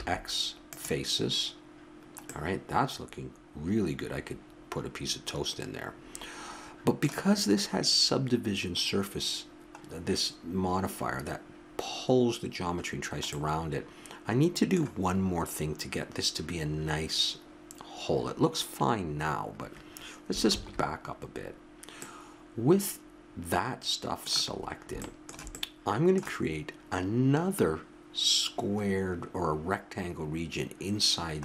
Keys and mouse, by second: 0.0 x, 2.3 click, 6.7-11.0 middle drag, 20.5 ctrl+z, 24.5-27.4 middle drag.